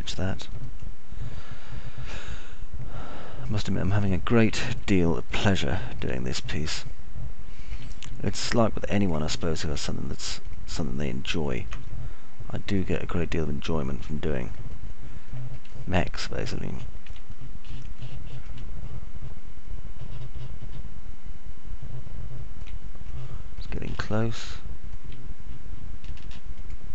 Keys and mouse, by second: 0.0 ctrl+click, 1.0 click, 2.1-5.1 alt+middle drag, 5.6 middle click, 6.0 alt+middle click, 6.8 middle click, 7.1-8.8 alt+middle drag, 11.5 ctrl+click, 13.0 alt+middle click, 17.0-18.1 alt+middle drag, 19.0 middle click, 19.6-23.6 alt+middle drag, 24.1 middle click, 25.0-26.0 alt+middle drag.